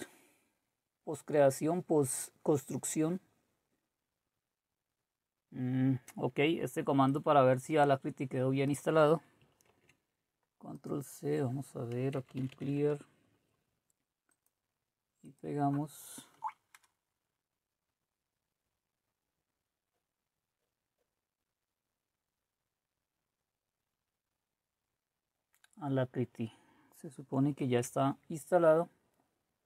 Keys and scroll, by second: 9.7 ctrl+c, 11.9-13.1 typing, 16.3 Right, 16.7 Return, 27.6 alt+Tab.